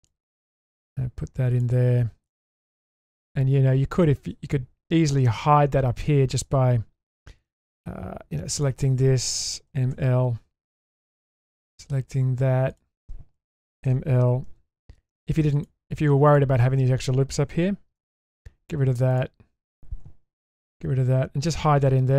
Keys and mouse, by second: 2.3 middle click, 2.8-3.2 shift+middle drag, 4.0 shift+middle click, 4.7 Tab, 5.3 Tab, 9.7 m, 13.6 m, 14.5 2, 15.5 alt+click, 16.3 alt+shift+click, 18.1 ctrl+x, 20.6 ctrl+x, 21.1 Tab.